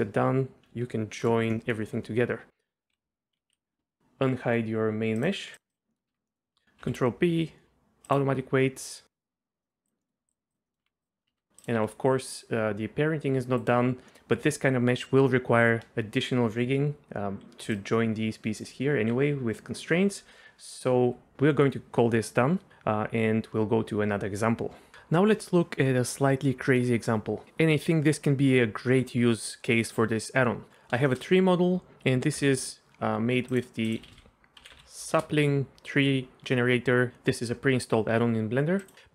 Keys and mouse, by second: 1.2 ctrl+j, 1.5 middle click, 2.9 KP_Divide, 3.5 KP_Divide, 5.5 click, 5.9 middle click, 6.1 Tab, 6.3 middle click, 6.8 ctrl+p, 9.6 middle click, 10.0 middle click, 10.7 middle click, 10.8 Tab, 11.0 click, 11.3 Tab, 11.8 r, 17.6 d, 18.1-19.0 d, 31.1 shift+middle click, 32.4 ctrl+,.